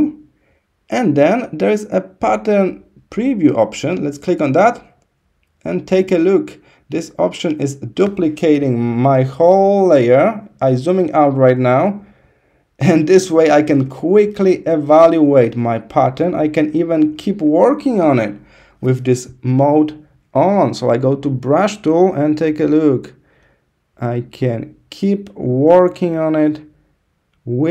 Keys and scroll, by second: 8.7 super+-, 10.4 super+-, 13.1 super+=, 13.6 super+=, 14.4 super+=, 16.5 super+-.